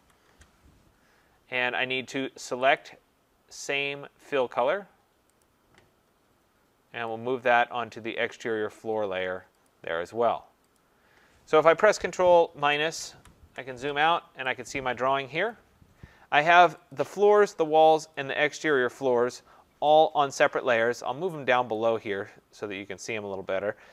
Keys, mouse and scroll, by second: 0.0-0.5 typing, 2.8 click, 5.5 click, 8.4 click, 9.7 click, 10.8 click, 12.6 ctrl+-, 12.8 ctrl+-, 13.1 ctrl+-, 15.2-15.6 scroll, 15.5 click, 16.9 click, 17.6 click, 18.1 click, 20.0 shift+click, 20.2 shift+click, 21.7 click.